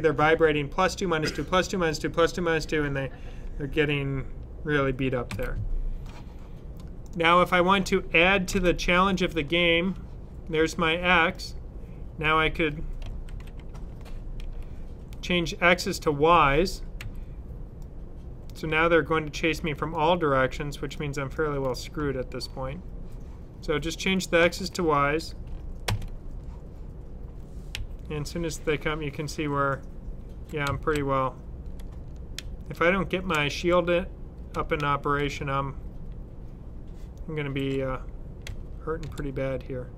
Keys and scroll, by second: 5.2 super+w, 7.0 super+w, 8.4 super+s, 13.1 super+c, 16.8 typing, 18.4 typing, 19.9 typing, 21.3 typing, 34.6-35.2 typing, 37.2-38.9 typing.